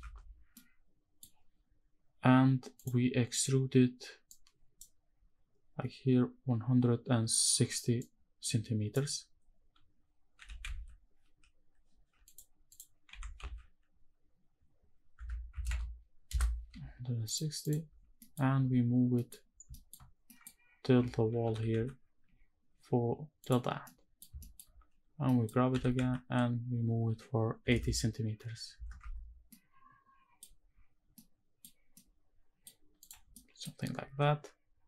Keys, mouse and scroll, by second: 0.3 middle click, 2.5 click, 9.1-9.8 scroll down 1, 9.8 scroll down 1, 12.0 click, 12.4 click, 12.8 g, 13.0 z, 14.8 KP_1, 15.2 KP_6, 15.3 KP_0, 16.0 KP_Enter, 16.9 click, 17.3 click, 17.6 scroll down 2, 17.9 middle click, 18.4-18.8 scroll down 2, 18.8 middle click, 19.3 scroll down 2, 19.4 shift+middle click, 20.0 middle click, 20.3-21.1 scroll up 1, 21.1 g, 21.5 x, 23.1 ctrl+click, 23.5 middle click, 24.1 shift+middle click, 24.4-24.8 scroll up 1, 24.8 scroll down 1, 25.0 middle click, 25.4 g, 25.7 x, 27.3 KP_8, 27.5 KP_0, 28.5 KP_Enter, 28.7 Tab, 29.0 scroll down 2, 29.2-30.1 middle drag, 30.3-30.8 scroll down 1, 30.8-31.3 middle drag, 31.6-32.3 middle drag, 32.7 click, 33.0 middle drag, 33.5 scroll up 2, 33.8 ctrl+s.